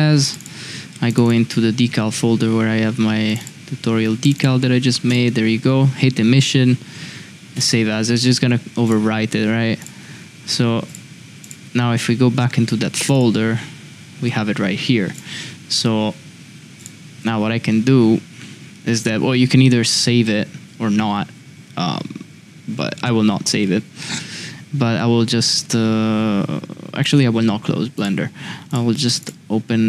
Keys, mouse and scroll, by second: 24.0 middle drag.